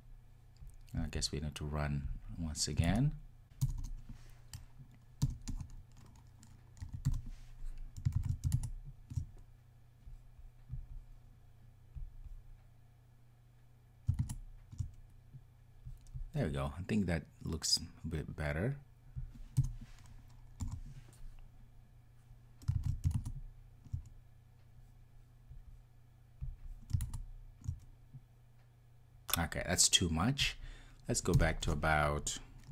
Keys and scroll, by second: 2.2 ctrl+r, 12.0 ctrl+r, 23.3 super+s, 26.4 ctrl+r.